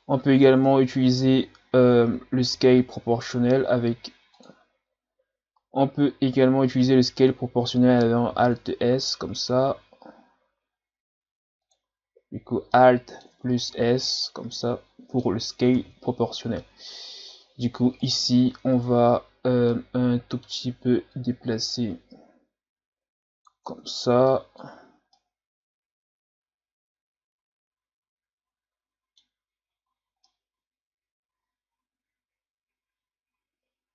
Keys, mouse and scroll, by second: 0.3-0.7 scroll down 6, 0.7 Tab, 4.4 click, 8.3 alt+s, 12.7 middle click, 13.3 Tab, 13.7 a, 14.1-15.7 middle drag, 15.7 KP_1, 17.0-17.5 scroll down 3, 17.5 scroll up 1, 18.0 right click, 18.4 scroll up 2, 18.7 Tab, 19.7-21.1 middle drag, 21.1-23.7 drag, 23.7 Tab, 24.0 scroll down 3, 24.3-24.7 middle drag, 24.7 a, 25.2-28.2 middle drag, 29.9-30.2 scroll up 1, 30.2-33.3 middle drag.